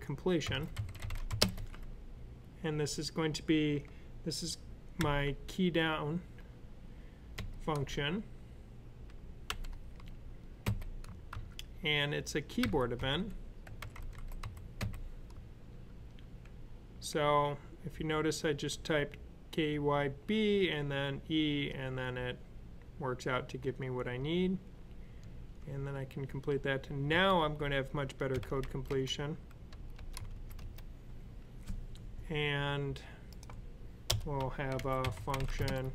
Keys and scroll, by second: 0.3-1.1 typing, 4.8 k, 7.2 d, 9.3 typing, 10.5-11.2 typing, 12.4-14.6 typing, 25.5 typing, 26.9 typing, 28.1-28.8 typing, 29.9-30.6 typing, 34.3-35.9 typing.